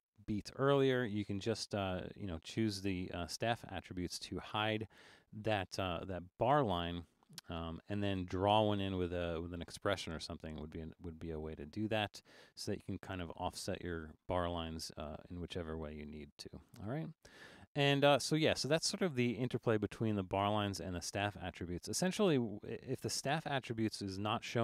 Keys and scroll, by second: 15.3 super+z, 16.1 super+z.